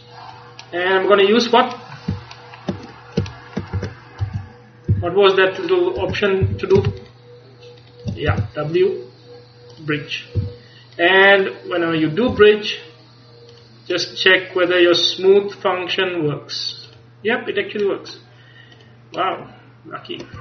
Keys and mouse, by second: 0.8 middle click, 2.4-3.9 middle drag, 3.9 Tab, 4.3 z, 5.0 a, 6.1 Tab, 6.5 a, 8.4 w, 10.4 a, 11.0-12.4 middle drag, 12.4 Tab, 16.9-18.0 drag, 18.0-19.3 middle drag, 19.4-20.4 middle drag.